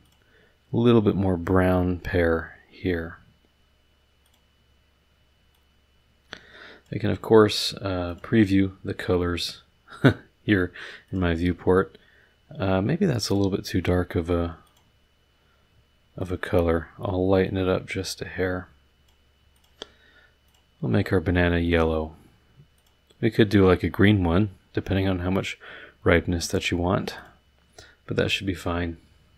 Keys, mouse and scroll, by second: 0.0 click, 4.2 click, 5.5-7.0 drag, 8.1 click, 11.0 click, 13.2 click, 14.6 click, 16.2 click, 17.4-19.3 drag, 19.5 click, 20.4 click, 21.6 click, 22.7 click, 25.0-26.8 drag, 27.1 click.